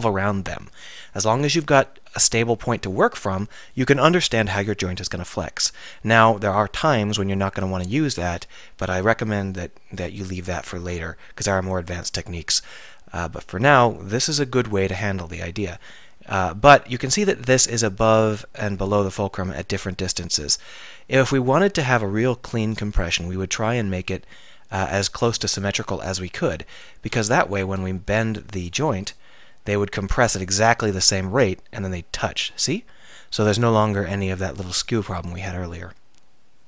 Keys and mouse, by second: 19.6-25.2 drag, 25.2-26.8 middle drag, 26.8 click, 27.4 Tab, 29.3 r, 30.4 click, 35.4 click.